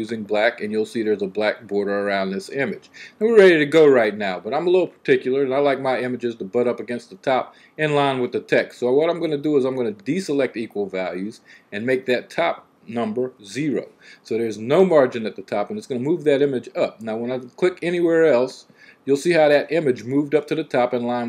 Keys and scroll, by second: 13.2 0, 15.9 typing.